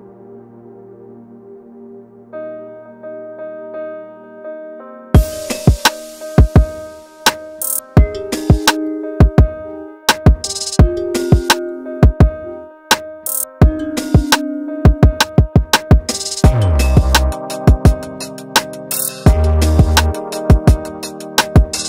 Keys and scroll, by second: 8.4 F1, 8.6 F2, 18.7 F1.